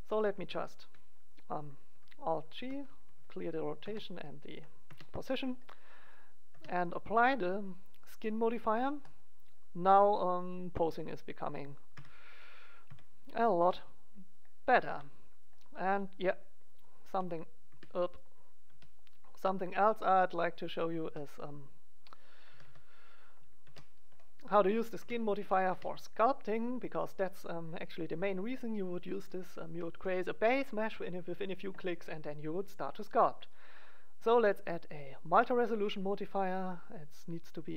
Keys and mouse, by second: 0.3 ctrl+g, 2.6 alt+g, 3.8 alt+r, 4.8 Tab, 6.4 Tab, 7.3-8.8 drag, 9.0 click, 10.1 middle click, 11.0 right click, 11.0-12.6 drag, 11.8 KP_1, 12.7 click, 12.9 KP_3, 13.5 r, 14.6 right click, 14.8 r, 17.0 r, 17.4-19.8 right drag, 18.6 r, 20.3-22.2 drag, 20.7 right click, 21.0 r, 21.9 middle click, 22.4 a, 22.6 click, 22.6 a, 23.6 alt+r, 24.9 Tab, 25.6 Tab, 27.8 right click, 28.4 middle click, 29.3 right click, 29.3-33.4 middle drag, 33.4-35.2 drag, 36.8-37.7 drag.